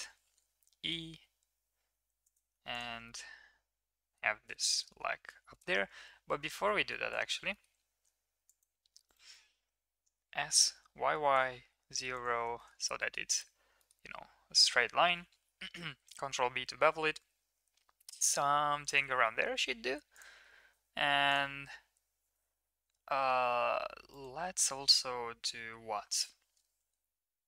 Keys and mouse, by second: 0.4 e, 2.5 Tab, 2.7 middle click, 3.0-4.2 middle drag, 4.5 shift+middle drag, 4.7 middle drag, 4.9 Tab, 5.5 middle drag, 5.7 ctrl+z, 6.0 ctrl+z, 6.3 ctrl+z, 6.7 ctrl+z, 7.5 middle click, 7.9 ctrl+r, 10.2 s, 13.0 middle click, 13.7 click, 13.7 middle click, 14.5 ctrl+v, 16.0 ctrl+b, 19.4 3, 20.1 click, 21.2 click, 22.9 ctrl+r.